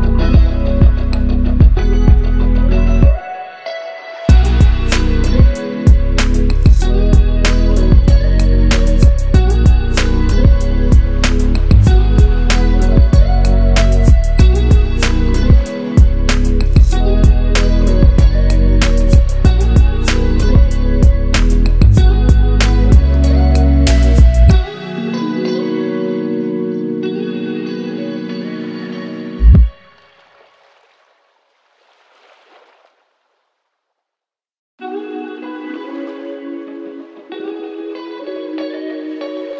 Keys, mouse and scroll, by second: 0.1 ctrl+a, 0.7 click, 2.6 ctrl+c, 3.0 click, 3.8 ctrl+v, 4.4 click, 4.9 Caps_Lock, 5.0-6.4 drag, 7.8-8.8 shift+drag, 12.8-13.2 scroll down 1, 13.7-15.0 shift+drag, 16.1 c, 16.4 click, 17.1 Left, 17.5 Down, 18.1 Left, 18.4 Up, 18.6 click, 19.9 click, 25.8 click, 26.6 shift+click, 28.1-28.6 shift+drag, 29.0 Left, 29.8 Down, 30.0 Up, 30.2 Down, 30.9-32.8 shift+drag, 31.5-32.4 shift+drag, 32.8 Up, 34.9 ctrl+g, 35.1 shift+click, 35.4 c, 35.6-39.5 drag.